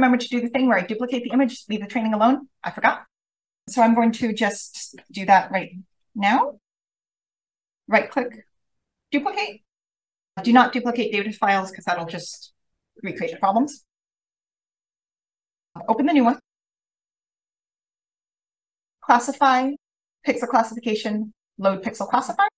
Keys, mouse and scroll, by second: 1.4-3.6 scroll up 1, 3.6-5.1 scroll up 1, 3.7 click, 5.1-5.6 scroll down 1, 5.6 click, 5.9 ctrl+click, 8.8 click, 14.5 click, 15.8 click.